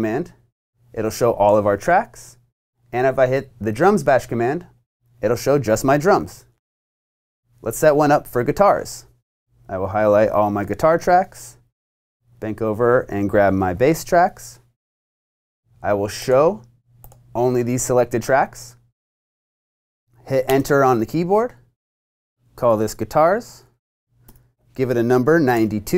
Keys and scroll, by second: 20.4 Return, 22.4-25.9 typing, 25.0 Tab.